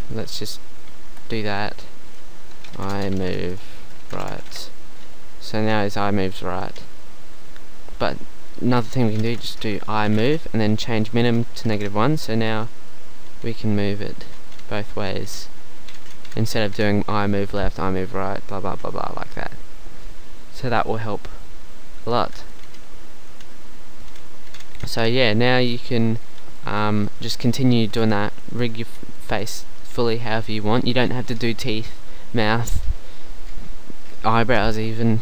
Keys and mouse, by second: 1.1 Tab, 8.5-10.1 drag, 14.4 click, 24.4-26.5 drag, 26.5-27.7 middle drag, 28.6 middle click, 30.5-33.0 middle drag.